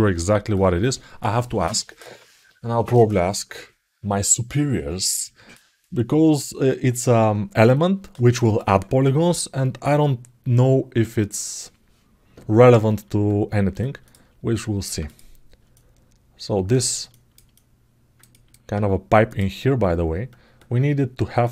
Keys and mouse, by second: 13.0 alt+middle click, 13.8 alt+shift+middle click, 14.3 alt+middle click, 14.8 click, 15.5-16.7 alt+middle drag, 16.8 alt+shift+middle click, 17.3-18.3 alt+middle drag, 19.0 click.